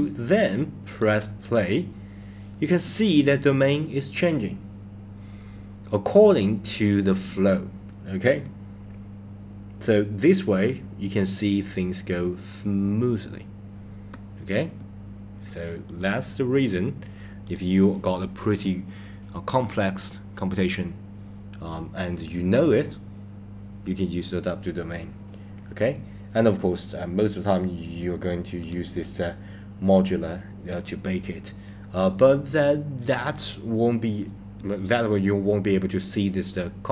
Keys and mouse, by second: 0.9 click, 15.9 click, 17.5 click, 28.2 click, 28.6-30.7 drag.